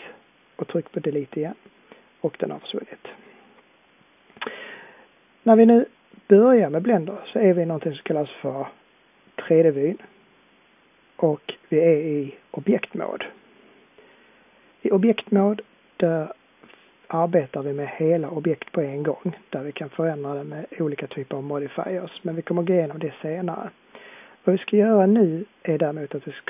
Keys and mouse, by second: 10.0-10.4 drag, 11.5 drag, 12.6-15.7 drag.